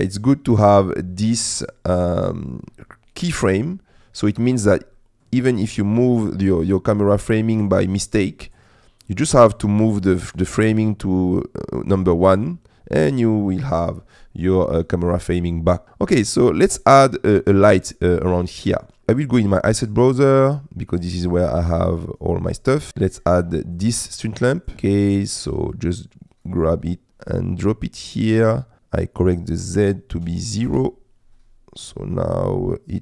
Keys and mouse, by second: 4.4 click, 5.0 middle click, 7.1 middle click, 9.3-10.4 drag, 19.0 click, 21.9 click, 28.5 click, 29.4-31.3 drag, 32.0-33.0 middle drag.